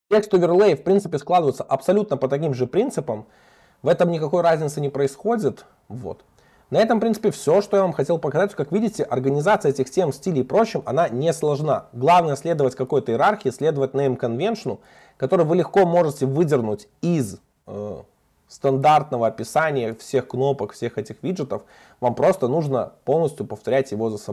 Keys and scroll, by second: 5.9 super+1, 15.0 super+b.